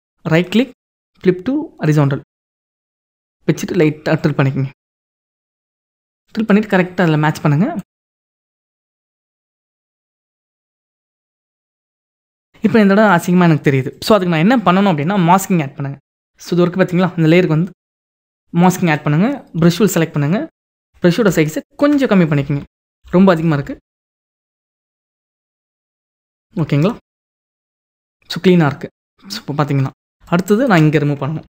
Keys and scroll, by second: 19.1 b, 20.4 ctrl+=, 26.1 ctrl+-, 31.0 ctrl+=.